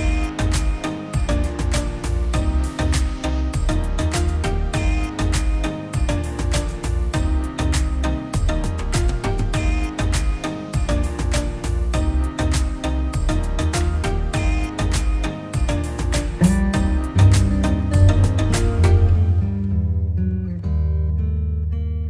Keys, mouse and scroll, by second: 16.1 double click, 18.0 ., 18.4 Return, 18.5 5.